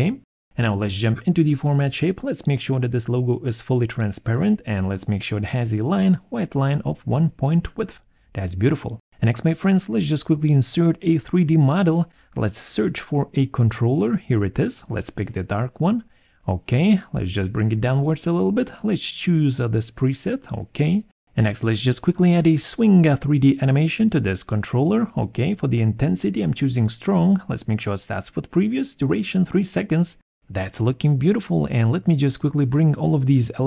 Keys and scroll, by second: 0.1 alt+4, 12.2-13.0 typing, 13.2 Return, 28.9 3, 29.0 Return.